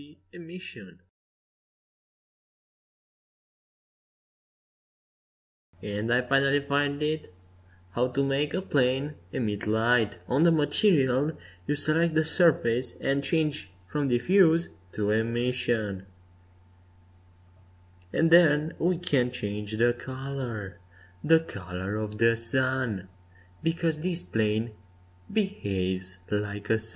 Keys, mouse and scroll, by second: 5.1-7.5 middle drag, 7.5-9.1 drag, 10.7-12.7 drag, 14.7-18.4 drag, 19.3-22.3 middle drag, 24.2-26.4 drag.